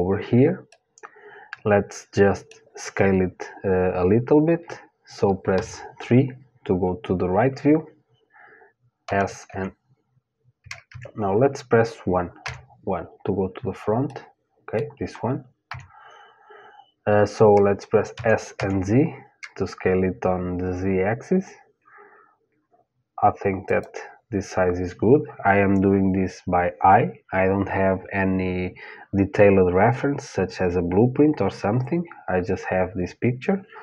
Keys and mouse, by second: 0.3-5.1 middle drag, 5.1 KP_3, 8.7 s, 12.0 KP_1, 13.7-15.7 middle drag, 15.3 KP_1, 17.7 s.